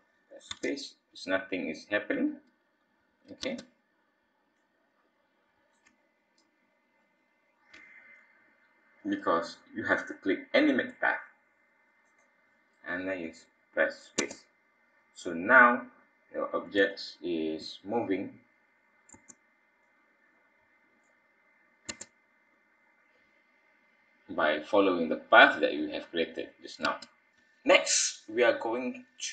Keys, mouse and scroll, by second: 0.5 space, 3.4 space, 4.5 click, 12.0 click, 14.2 space, 16.3-16.7 scroll up 3, 16.9 shift+middle click, 19.1 space, 19.8 click, 21.8 space, 26.8 space, 27.4 space, 27.9 click, 28.5 click, 28.6 click.